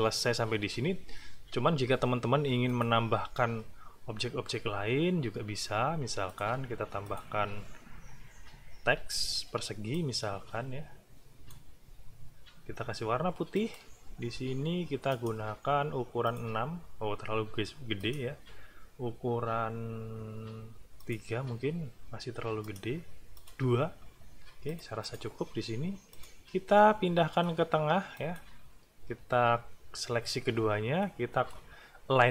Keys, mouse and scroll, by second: 2.7 click, 6.3 click, 7.0 click, 9.2 r, 9.9-11.7 drag, 13.5 shift+click, 15.1-16.5 drag, 18.0 click, 21.0 click, 22.6 click, 23.4 click, 24.7 click, 25.0 click, 26.1 click, 26.8 click, 27.6 shift+middle click, 28.1 shift+click, 28.5 shift+middle click, 31.0 click.